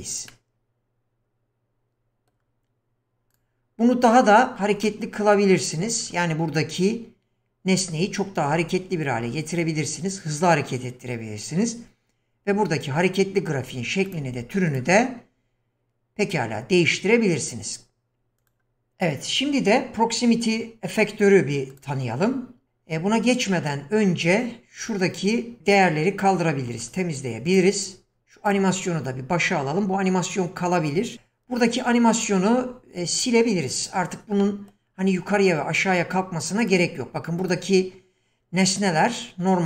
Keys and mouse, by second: 0.3-2.4 middle drag, 3.3 click, 4.1-4.4 middle drag, 4.8 middle drag, 14.7 click, 18.4 click, 21.7 click, 26.9 click, 27.5 click, 28.5 click, 34.4 middle click, 36.7 click, 37.4 click.